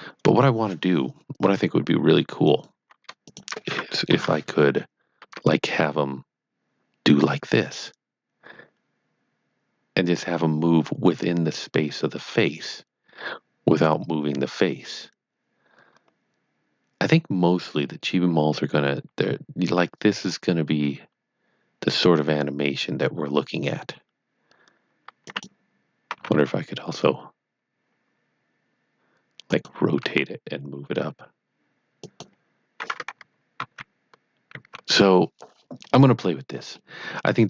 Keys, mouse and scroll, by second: 2.4 scroll down 1, 2.5 click, 3.2 shift+click, 4.1 KP_1, 5.2 g, 25.2 g, 25.2 right click, 26.1 r, 29.4 r, 29.5 click, 30.0 g, 32.0 click, 35.5 scroll down 2, 36.2 middle click, 37.1-37.4 scroll down 1.